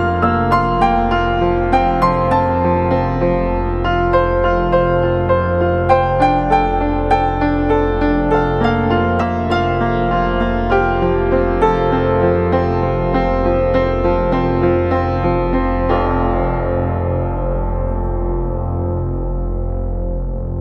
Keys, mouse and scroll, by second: 1.9 ctrl+d.